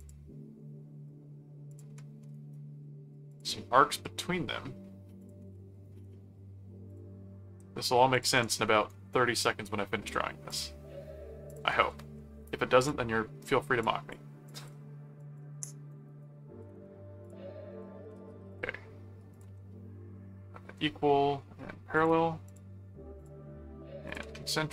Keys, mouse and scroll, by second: 0.0 click, 1.7 click, 2.3 right click, 3.3 click, 5.2 click, 5.8 right click, 6.9 click, 8.1 click, 9.4 right click, 10.5 click, 11.5 click, 12.8 click, 13.8 click, 14.4 click, 15.2 click, 16.0 right click, 17.2 ctrl+click, 18.5 ctrl+click, 19.3 ctrl+click, 20.6 alt+q, 21.9 click, 23.2 ctrl+click, 24.1 ctrl+click.